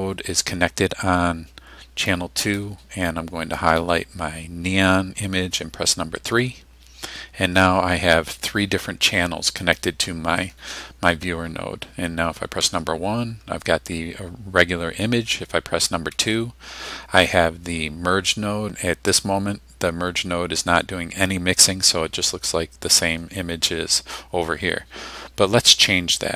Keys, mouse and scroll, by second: 2.1-2.8 drag, 3.6 click, 6.3 3, 9.6 click, 12.6 1, 16.1 2.